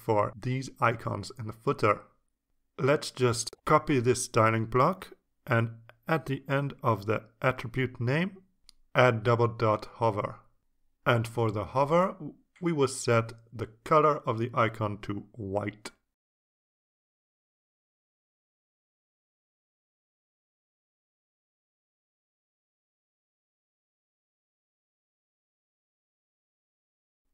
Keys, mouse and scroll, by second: 2.8 click, 4.7 click, 6.6 click, 7.6 click, 8.8 click, 9.9 click, 10.0 Right, 10.8-12.3 typing, 12.8 click, 13.7 click, 14.2 click, 14.8 BackSpace, 16.1 KP_Subtract, 16.9 ctrl+space, 18.0 Right, 18.5 BackSpace, 20.3 click, 21.2 click, 21.9 Right, 22.3 shift+0, 23.6 click.